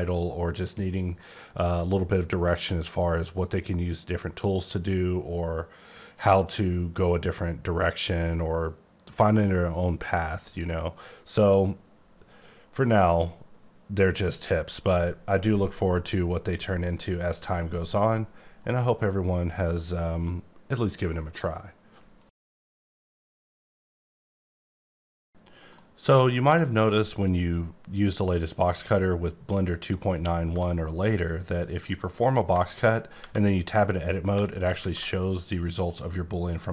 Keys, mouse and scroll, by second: 28.7 click, 30.6 shift+middle click, 31.8 click, 32.5 shift+click, 32.6 shift+middle click, 32.9 scroll down 1, 34.8 a.